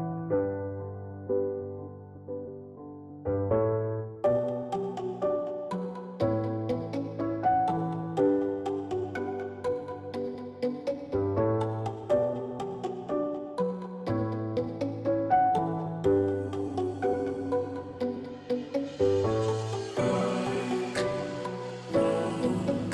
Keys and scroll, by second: 0.0-22.9 typing.